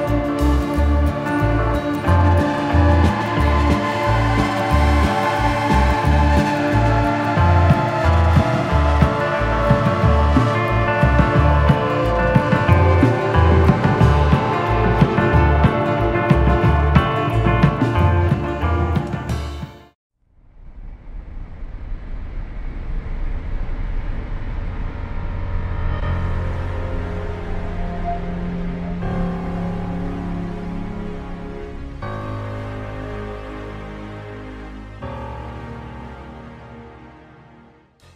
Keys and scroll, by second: 2.7 Escape, 11.9-13.8 typing.